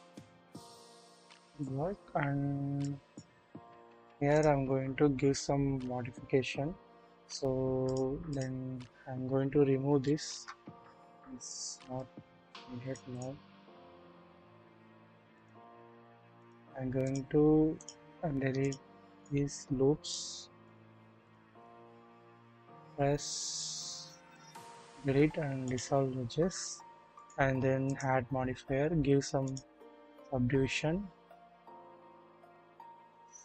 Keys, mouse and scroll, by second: 1.7-2.4 middle drag, 1.7 scroll down 1, 1.8-2.4 scroll up 1, 2.8 click, 4.3 click, 6.8-7.8 scroll down 1, 7.8-8.4 drag, 10.0 shift+middle click, 11.3 alt+click, 12.9 double click, 15.3 alt+shift+click, 16.3 alt+shift+click, 21.2 shift+click, 22.3 Delete, 27.2 drag, 29.5 click.